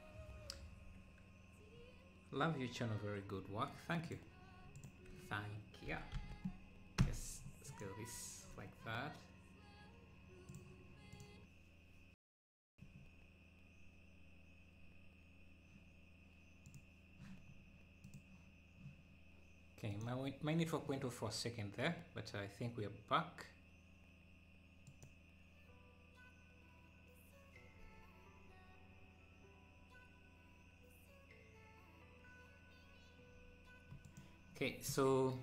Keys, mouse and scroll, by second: 4.1-5.9 drag, 5.9 s, 6.8 s, 11.1 click, 24.9 click.